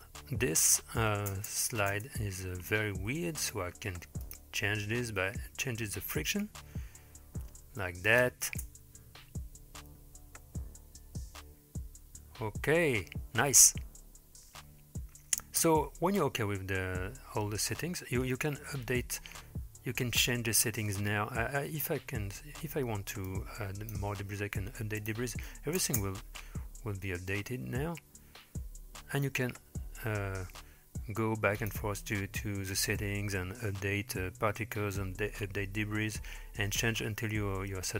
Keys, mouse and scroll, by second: 1.3 space, 2.0 space, 4.3 click, 6.4-8.3 drag, 8.5 space, 15.5 space, 18.2 scroll down 2, 19.0-20.5 scroll down 1, 23.3-23.9 drag, 25.0-25.4 drag, 25.8 space, 30.7-31.6 scroll down 2, 31.6 click, 31.6 scroll down 1, 32.7 click.